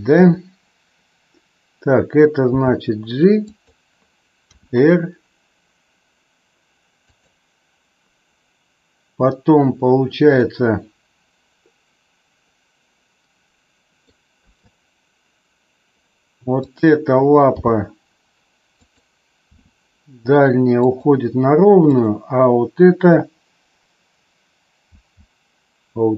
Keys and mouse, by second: 0.2 KP_3, 2.4 g, 3.4 click, 4.6 r, 7.0 click, 10.3-13.9 middle drag, 14.4 KP_3, 16.6 click, 17.6 g, 18.7 click, 19.4 r, 20.8 click, 21.8 click, 24.9 g.